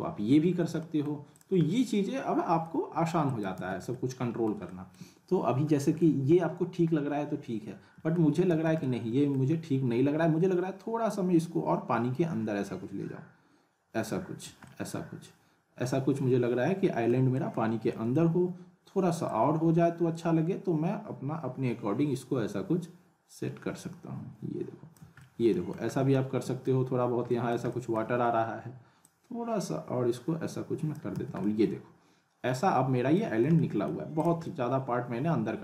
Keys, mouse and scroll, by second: 0.8 alt+middle click, 1.3 click, 1.7-2.9 middle drag, 3.2 click, 3.5 z, 3.9-4.5 alt+middle drag, 8.5 z, 8.8-9.4 alt+middle click, 9.5-11.0 scroll up 1, 11.0-11.7 drag, 14.6-17.1 alt+middle drag, 17.7 scroll up 1, 17.9 alt+middle click, 19.5-25.8 click, 24.9 click, 25.2 alt+middle click, 25.9 scroll up 1, 26.4 alt+middle click, 27.0 scroll down 1, 29.0-31.2 drag, 31.1 z, 31.4-33.3 alt+middle drag, 34.2 click, 34.4-35.6 alt+middle drag.